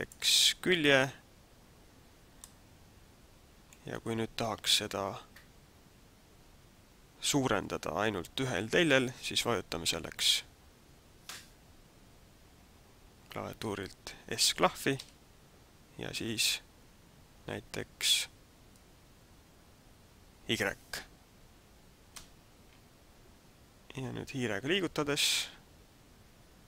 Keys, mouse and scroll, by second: 0.1 click, 0.9 right click, 1.8 scroll down 1, 2.4 middle click, 14.9 s.